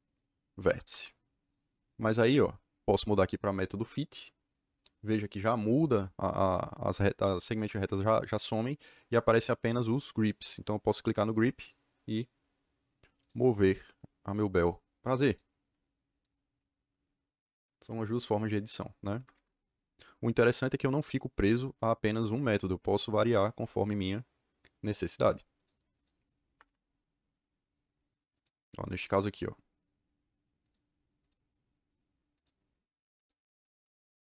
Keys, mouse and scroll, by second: 0.6 Escape, 1.3 click, 2.2 click, 3.8 click, 11.5 click, 13.1 click, 14.2 click, 14.6 click, 15.2 click, 16.0 click, 18.9 Escape, 19.1 Escape, 19.3 Escape, 22.0 click, 22.9 click, 23.6 click, 25.5 click, 25.9 click, 26.4 Escape, 28.3 click, 30.6 click, 31.2 click, 32.3 click, 33.1 click.